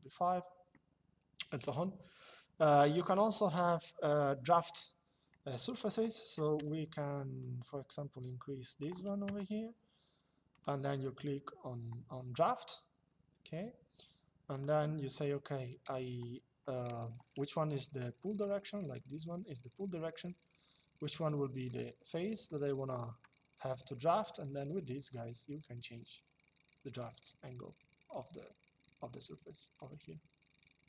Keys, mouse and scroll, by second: 2.8 click, 5.4 click, 9.0 KP_Enter, 10.2 click, 14.3 click, 18.1 click, 21.4 click, 22.2 shift+click, 23.8 click, 30.6 click.